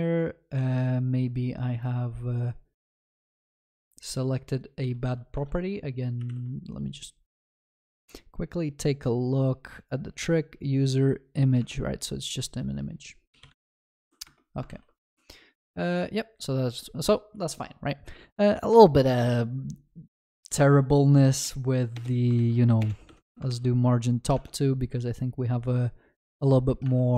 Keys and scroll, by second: 14.0 ctrl+s, 22.4 ctrl+s, 26.9 ctrl+s.